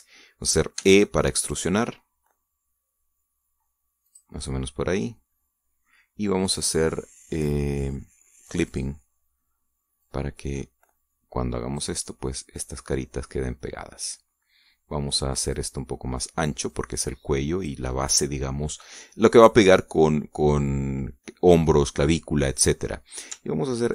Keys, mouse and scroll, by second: 0.0 shift+right click, 0.3 shift+middle click, 1.6 e, 4.8-6.8 drag, 5.1-6.8 right drag, 9.5 click, 10.8-12.8 drag, 13.4-16.5 drag, 17.5-18.6 drag, 23.5 middle click.